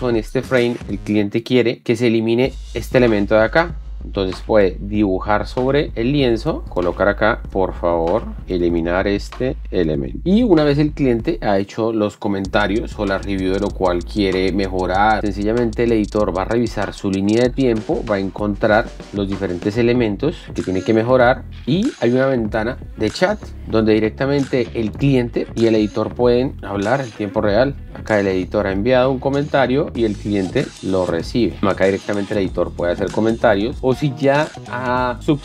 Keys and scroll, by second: 7.4-10.4 typing, 15.6 alt+Tab, 31.6 alt+Tab.